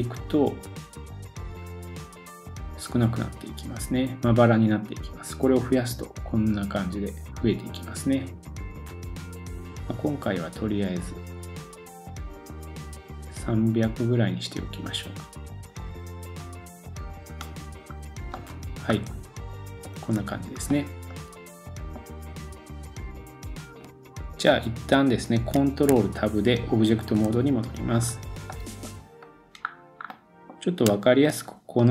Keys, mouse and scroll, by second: 18.0 scroll down 1, 18.3 middle click, 20.0-20.8 scroll down 3, 20.7 middle click, 25.9 ctrl+Tab, 27.6-28.0 scroll up 2, 28.0-28.5 scroll down 1, 28.5 middle click, 29.3-31.9 middle drag, 29.6-30.1 scroll up 4, 31.4-31.9 scroll down 2.